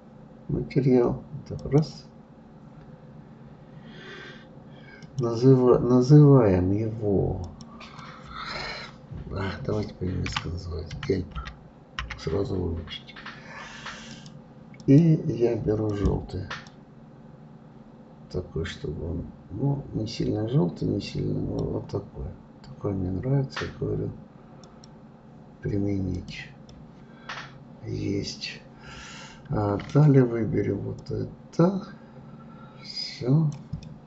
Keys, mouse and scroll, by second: 1.6 click, 5.0-7.2 drag, 7.4-10.4 drag, 14.8 click, 24.6 click, 26.1 click, 26.7-29.7 middle drag, 31.0-33.8 drag, 33.8-34.0 middle drag.